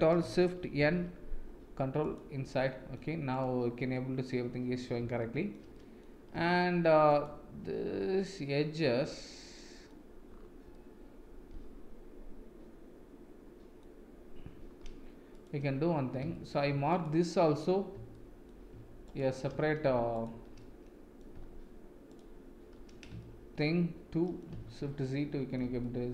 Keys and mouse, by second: 0.8 shift+n, 2.0 click, 2.7 middle click, 3.3 click, 3.9 middle click, 5.2 shift+middle click, 5.7 middle click, 7.0 alt+click, 7.9-9.9 middle drag, 10.7-13.8 middle drag, 16.3 shift+middle click, 18.1 shift+middle click, 20.6 middle click, 23.2 shift+middle click, 24.2 middle click, 24.6 shift+z, 25.1-25.5 middle drag, 25.8-26.1 middle drag.